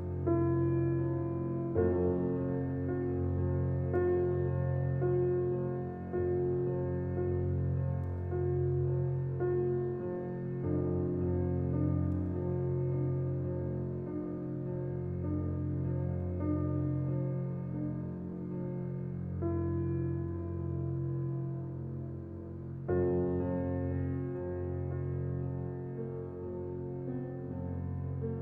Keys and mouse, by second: 4.1-5.7 ctrl+alt+drag, 7.3 click, 8.4 click, 9.7 click, 11.7-13.3 drag, 14.0 Tab, 15.1-16.1 alt+shift+drag, 18.8-20.4 drag, 20.8 ctrl+z, 21.7 ctrl+z, 22.3 ctrl+z, 22.9 ctrl+z, 25.9 click.